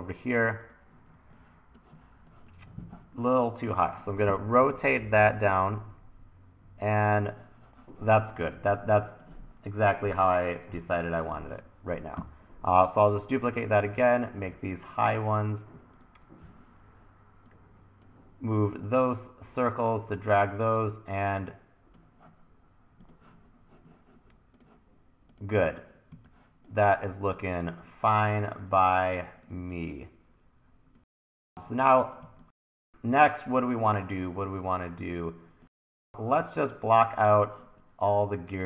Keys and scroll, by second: 1.1 1, 4.3 r, 8.6 1, 12.2 r, 14.5 1, 16.4 e, 26.2 1, 32.2 1, 36.6 1, 37.2 1.